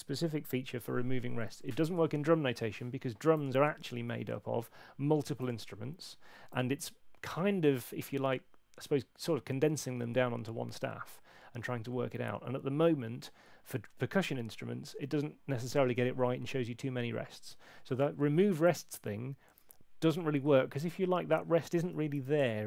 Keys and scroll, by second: 3.9 shift+super+l, 22.2 shift+super+l.